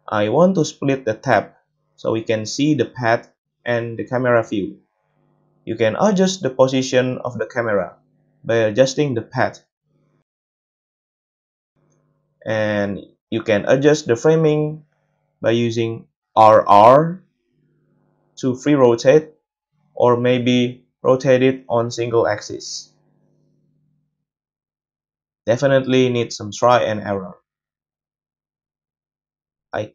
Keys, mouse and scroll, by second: 0.0 middle click, 0.3-6.3 drag, 2.4 n, 2.8 n, 5.6 KP_7, 6.3-7.0 middle drag, 7.0 click, 7.1 middle click, 7.7 click, 7.8-12.0 middle drag, 8.5 g, 12.0 click, 12.2 middle click, 13.0-20.0 drag, 13.0 r, 13.0 i, 15.2 r, 20.0-24.9 middle drag, 20.3 r, 24.9-27.8 drag, 25.1 r, 27.8 middle click, 28.2 i, 28.9 middle click, 29.5-29.9 drag, 29.8 space.